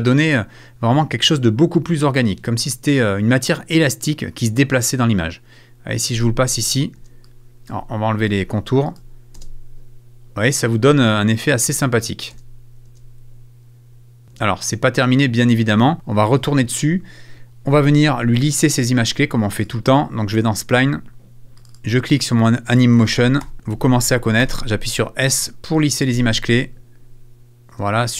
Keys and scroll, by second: 6.1 space, 9.3 space, 12.3 space, 14.2 space, 23.1 super+a, 23.4 super+f, 23.7 super+a, 24.4 super+s, 26.1 space, 27.7 space.